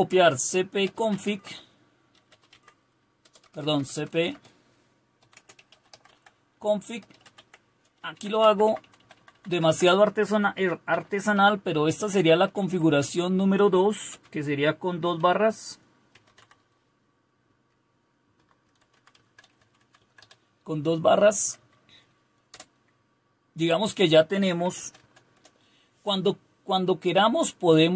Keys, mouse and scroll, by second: 0.0-3.7 typing, 4.9-9.0 typing, 9.1 Left, 9.3 Left, 9.5 Left, 9.7 Left, 10.3-11.3 typing, 12.1 Right, 12.3 Right, 12.5 Right, 12.7 Right, 12.8 Right, 13.8-14.6 typing, 15.9-20.7 typing, 21.2 Right, 21.4 Right, 21.5 Right, 22.5 Return, 24.5-25.8 typing.